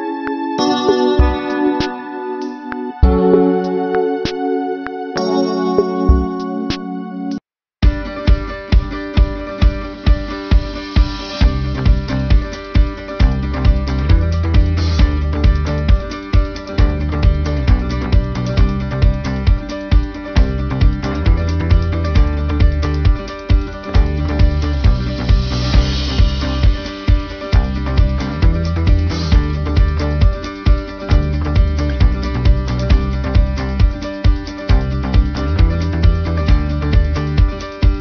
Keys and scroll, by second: 10.6 ctrl+-, 15.6 ctrl+alt+shift+n.